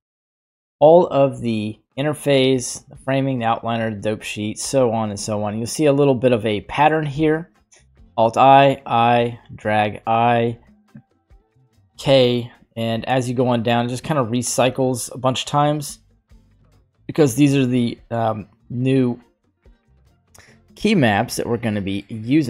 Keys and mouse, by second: 21.6-22.4 middle drag.